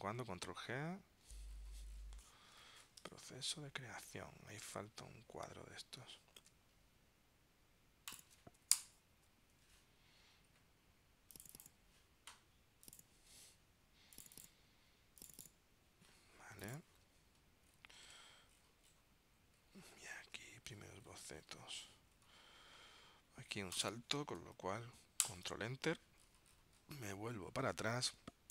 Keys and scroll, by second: 0.2 super+g, 3.1 super+Tab, 6.5 super+Tab, 18.2 super+Tab, 19.1 super+Tab, 20.4 super+Tab, 25.4 super+Return.